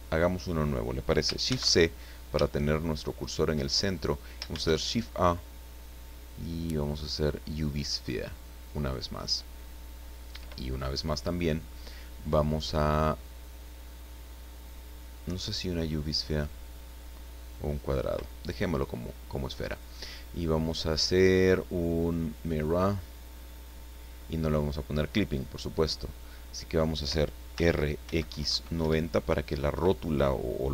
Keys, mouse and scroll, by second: 0.2 scroll down 1, 1.4 shift+c, 2.0-2.4 shift+scroll up 1, 2.4-3.5 shift+middle drag, 3.7-4.1 shift+scroll up 1, 4.5 shift+a, 7.5 click, 10.2 click, 19.6 click, 22.3 click, 27.5 r, 28.2 KP_9, 28.5 KP_0, 28.8 KP_Enter, 30.4-30.7 drag.